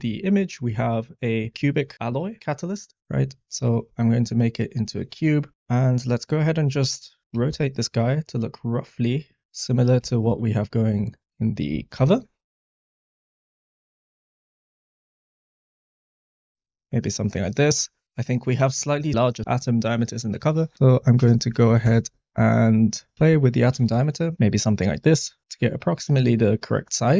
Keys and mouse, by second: 3.7 drag, 7.3 r, 7.4 r, 9.4-11.9 typing, 13.3-14.7 typing, 15.7 r, 16.1 r, 16.1 x, 16.3 click, 19.1-21.9 drag, 23.1 click.